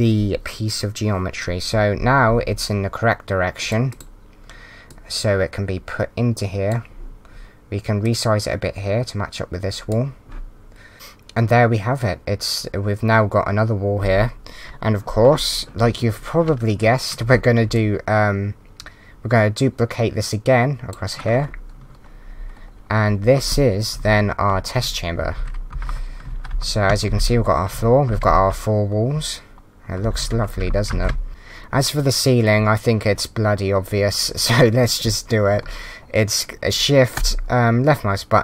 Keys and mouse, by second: 3.6 click, 8.0 click, 17.7 shift+click, 24.0 Right, 24.5 Up, 24.8-28.2 typing, 25.2 Right, 25.7 Up, 26.3 Down, 26.3 Right, 29.9-30.8 typing, 30.9 Down, 37.1 shift+click.